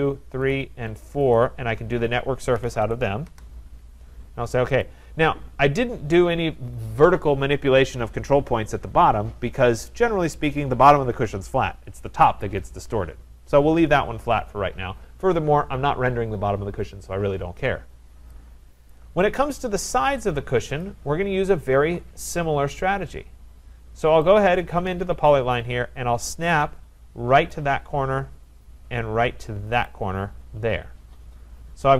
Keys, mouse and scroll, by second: 0.5 click, 1.4 click, 2.3-3.3 typing, 4.5-5.2 typing, 4.9 click, 5.6-6.1 scroll, 18.9 right click, 19.5-20.1 scroll, 20.1-20.7 scroll, 20.7 scroll, 20.8 click, 21.3-23.9 scroll, 23.9-24.2 scroll, 24.4 click, 27.5 click, 29.9 click, 31.7 Return.